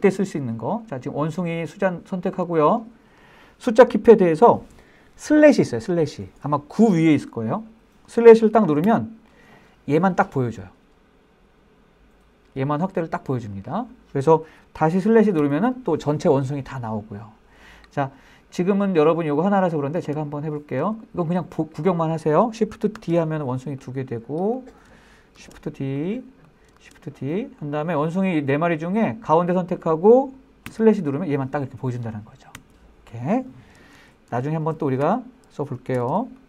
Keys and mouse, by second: 2.6 click, 9.1 KP_Divide, 15.6 KP_Divide, 18.7-19.0 shift+middle drag, 19.1 middle drag, 20.0 middle click, 20.4 shift+middle drag, 20.7-21.1 shift+middle drag, 21.2 shift+middle click, 21.5 middle click, 23.2 shift+d, 24.0 click, 25.6 shift+d, 26.2 click, 27.0 shift+d, 27.6 click, 28.3-28.9 middle drag, 29.7 click, 30.9 KP_Divide, 32.8 KP_Divide, 34.2 super+z, 34.5 super+z, 35.2 Escape, 36.2 Escape, 36.3 Escape.